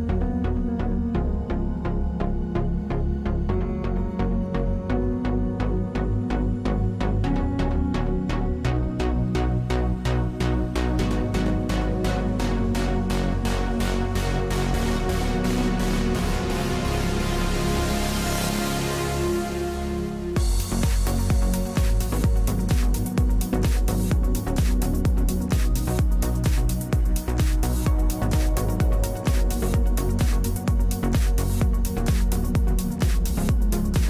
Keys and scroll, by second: 29.4 z, 31.0 z.